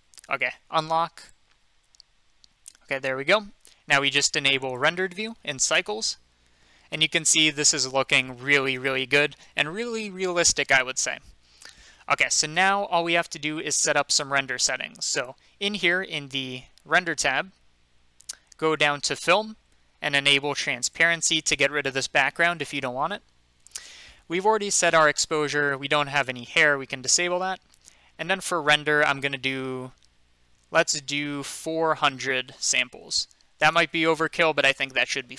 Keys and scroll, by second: 32.8-33.6 typing, 33.7 Return.